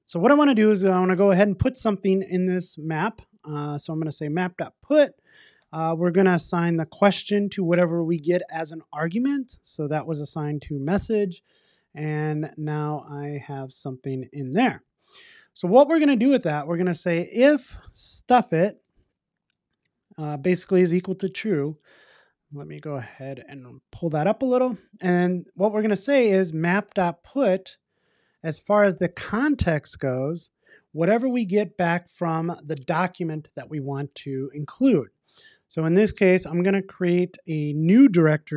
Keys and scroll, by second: 3.8 Return, 18.5 Return, 27.6 Return.